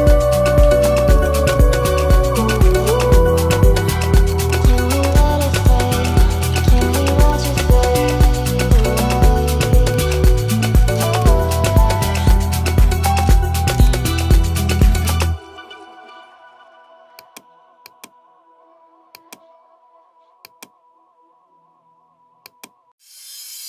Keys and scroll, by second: 16.5 Delete, 18.8 Delete.